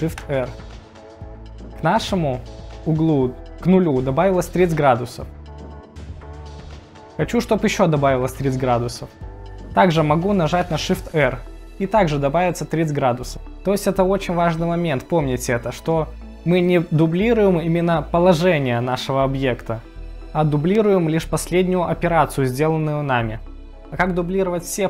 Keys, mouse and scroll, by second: 0.4 shift+r, 10.9 shift+r.